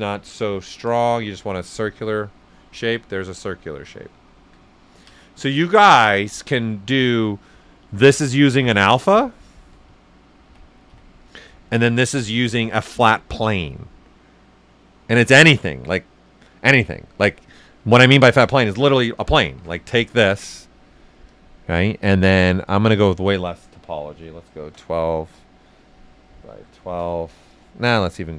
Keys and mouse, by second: 2.1 right click, 4.7 ctrl+right click, 5.5 ctrl+alt+right click, 5.9 ctrl+alt+right click, 11.7 click, 15.3-16.7 drag, 15.3 typing, 18.8 ctrl+right click, 19.4 shift+f, 20.6 click, 22.9 click, 23.8-24.6 typing, 25.4 click, 26.2-26.9 typing.